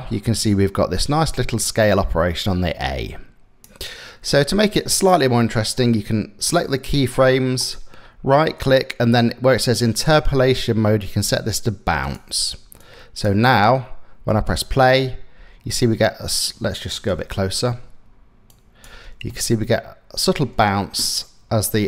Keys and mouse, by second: 3.9 click, 7.3 right click, 11.7 click, 12.4 click, 13.2 space, 13.9 space, 15.0 space, 16.7 KP_0, 16.9 KP_Decimal, 18.1 click, 18.7 space, 20.1 space, 21.3-21.8 drag.